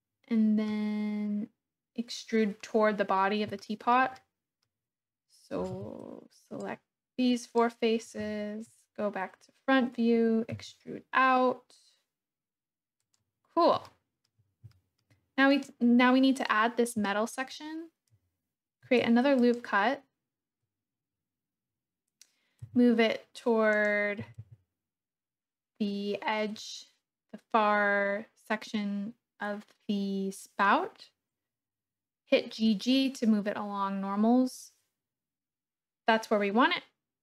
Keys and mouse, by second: 3.6 shift+click, 4.2 click, 5.7 3, 6.7 click, 8.7 KP_1, 10.5 e, 13.0 click, 13.8 shift+middle click, 14.8 shift+middle click, 17.1 shift+middle click, 18.8 ctrl+r, 22.6 g, 23.8 click, 24.2 g.